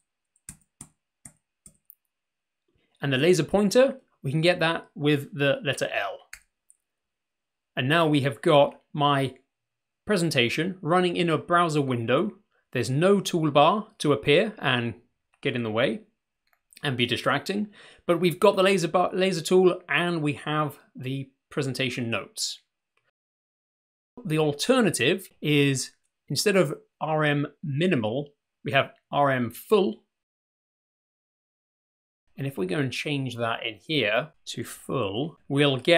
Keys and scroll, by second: 0.8 Right, 1.6 Left, 6.8 typing, 33.6-34.6 typing, 34.8 Return.